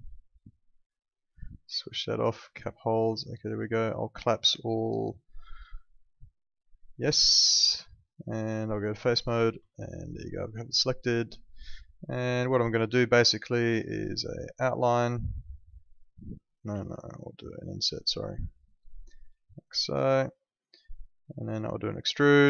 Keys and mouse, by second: 0.3 click, 3.2 alt+middle click, 4.1 right click, 5.6 click, 7.8 alt+middle click, 8.8 click, 9.7 alt+middle click, 11.6 click, 14.4 click, 17.6 click, 21.6 click.